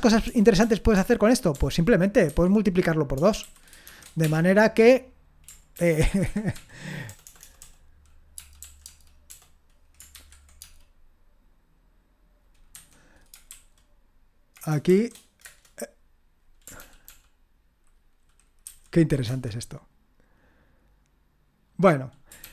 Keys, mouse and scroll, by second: 6.5 ctrl+p, 7.1-8.8 typing, 10.1 shift+8, 10.6 space, 12.7 2, 13.5 shift+], 15.5 Return, 16.8 ctrl+p, 17.1 ctrl+p, 18.7 ctrl+n, 19.2 Return, 22.4 ctrl+p.